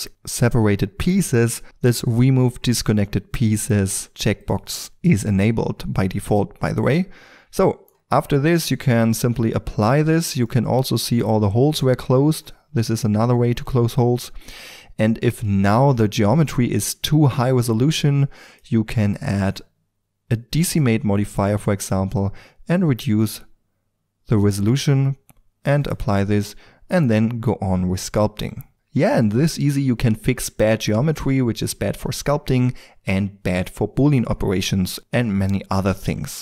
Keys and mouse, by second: 4.4 click, 8.1-9.2 middle drag, 9.2-11.0 drag, 11.0-18.3 middle drag, 18.4-20.7 drag, 22.1-23.9 drag, 25.8 click.